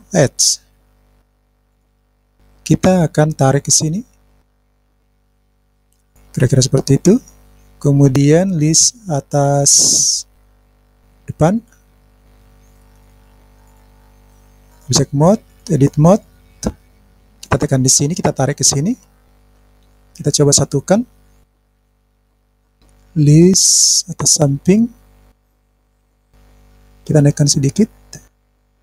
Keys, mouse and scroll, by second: 1.3 click, 3.5-4.5 drag, 4.6 click, 16.7 click, 17.2 click, 19.4 click, 19.8 click, 21.6 middle click, 21.9 click, 22.1 middle click, 22.1 scroll up 1, 22.5 click, 25.5 click, 26.0 middle click, 27.6 click, 28.4 click.